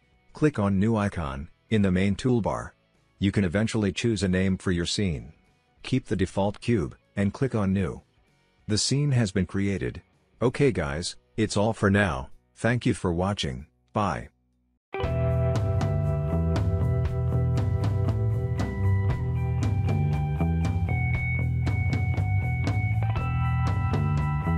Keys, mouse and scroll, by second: 3.8-4.9 drag, 7.8-8.9 drag, 10.2 right click.